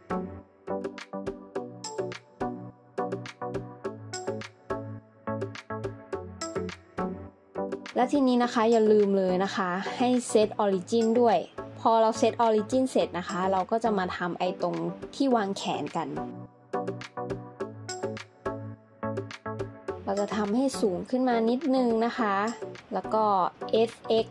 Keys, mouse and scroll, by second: 1.6 middle click, 6.6 scroll down 1, 15.2 shift+d, 17.1 g, 17.3 x, 19.5 Tab, 23.8 s.